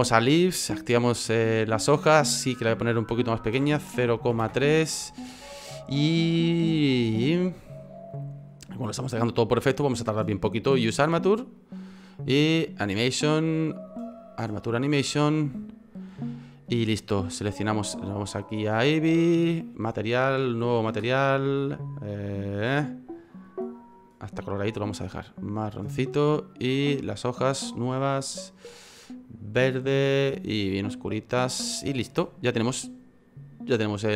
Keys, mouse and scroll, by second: 17.3 right click, 18.6 click, 19.7 click, 20.3 click, 20.6 click, 21.5 click, 24.8 click, 26.5 right click, 27.3 click, 27.7 click, 30.5 click.